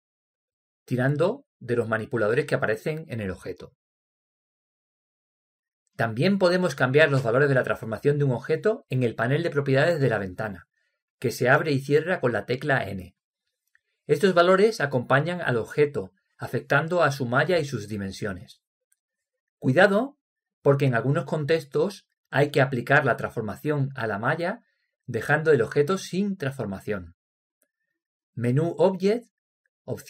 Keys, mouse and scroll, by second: 3.3-5.9 drag, 8.1-10.3 drag, 13.3 n, 14.3-18.8 drag, 19.0-20.8 drag.